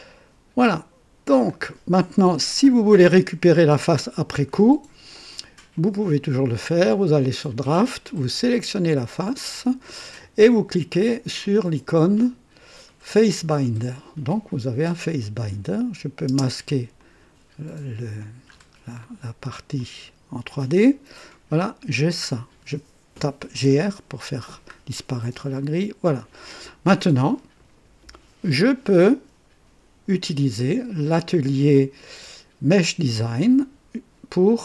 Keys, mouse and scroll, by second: 5.7 click, 7.1 click, 8.8 click, 13.1 click, 15.7 click, 16.3 space, 16.9-18.4 drag, 18.5 scroll up 2, 19.0 right click, 19.8-22.5 drag, 22.5-24.1 typing, 24.4-24.8 scroll down 1, 25.0-26.5 drag, 30.6 click, 32.7 click.